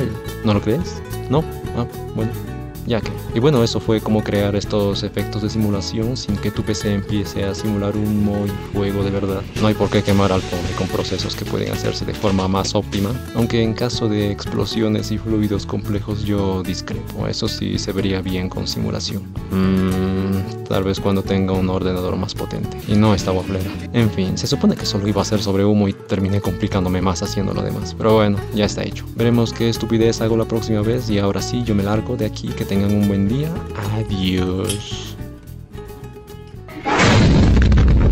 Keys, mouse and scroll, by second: 23.8 space.